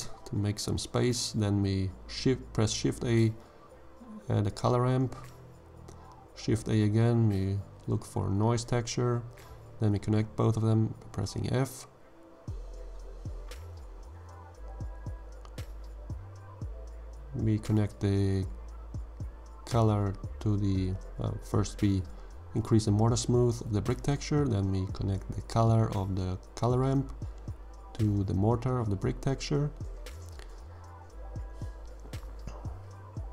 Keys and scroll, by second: 0.0 g, 3.4 shift+a, 4.3 c, 4.7 o, 4.9 l, 7.5 shift+a, 8.3 n, 8.6 o, 8.8 i, 13.4 f.